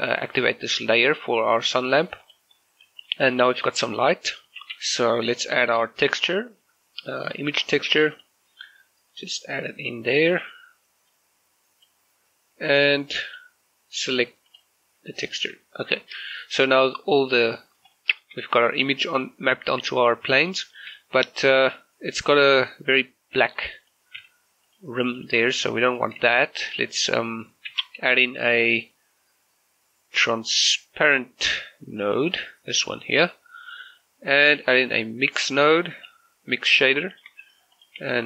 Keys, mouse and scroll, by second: 2.3 shift+click, 3.1 middle click, 3.5 shift+middle click, 4.7 shift+a, 7.7-13.3 drag, 15.3 middle click, 15.7 shift+middle click, 16.8 scroll up 1, 17.4-17.9 scroll down 1, 18.0 shift+middle click, 20.6 shift+middle click, 23.9 click, 24.3 g, 24.7 click, 25.7 g, 26.0 click, 26.5 shift+middle click, 27.7 shift+a, 32.4 click, 34.5 shift+a, 36.1 click, 37.1 shift+middle click, 37.8 click, 38.1 g.